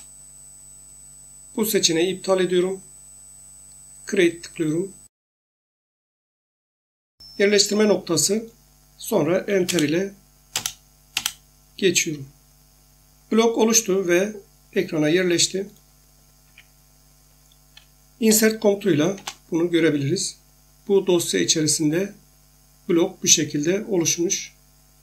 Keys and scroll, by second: 9.7 Return, 11.1 Return, 16.4 Escape, 18.3 i, 19.2 Return.